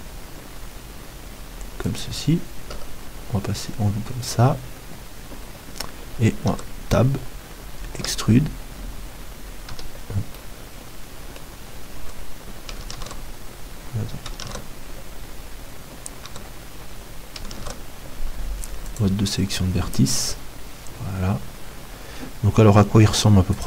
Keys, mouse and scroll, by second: 2.7 KP_1, 6.2 middle click, 6.5 Tab, 7.9 e, 9.7 Escape, 10.4 middle click, 12.0 Tab, 13.1 ctrl+Tab, 16.2 Tab, 17.6 ctrl+Tab, 20.2 KP_1.